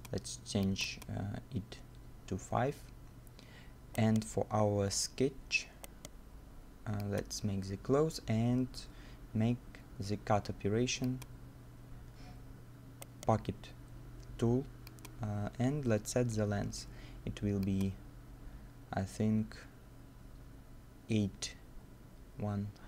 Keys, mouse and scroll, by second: 2.4-2.8 scroll down 1, 4.0 right click, 4.9 right click, 5.0-5.5 scroll up 1, 5.6 middle click, 5.9 right click, 12.0-12.6 scroll down 1, 12.6 middle click, 12.9 scroll down 1, 13.0 right click.